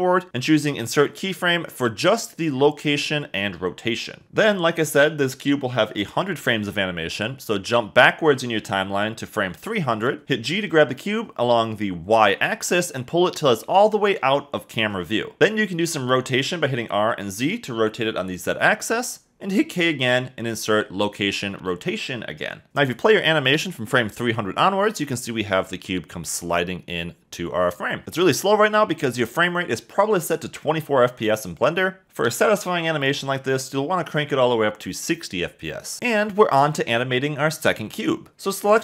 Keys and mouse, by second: 7.9 click, 10.8 g, 11.0 y, 14.8-16.2 drag, 16.2 r, 16.4 z, 19.7 1, 19.9 8, 19.9 0, 20.8 k, 23.1 space, 28.0 space, 29.9-31.2 drag, 33.3 space, 36.5 click, 38.2 click.